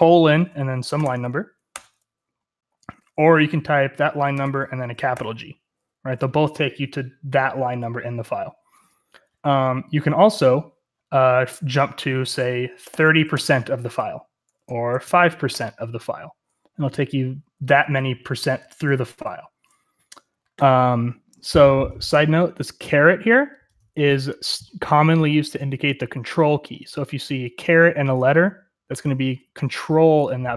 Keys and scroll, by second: 0.6-1.4 typing, 1.6 Return, 4.0-5.0 typing, 12.5-13.7 typing, 14.8-15.4 typing, 16.8-18.1 typing, 21.2-21.8 typing.